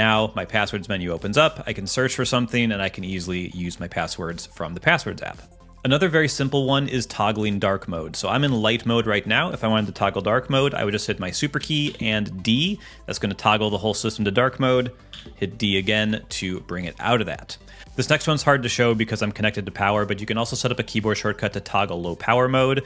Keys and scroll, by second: 11.8 ctrl+alt+super+d, 15.1 ctrl+alt+super+d.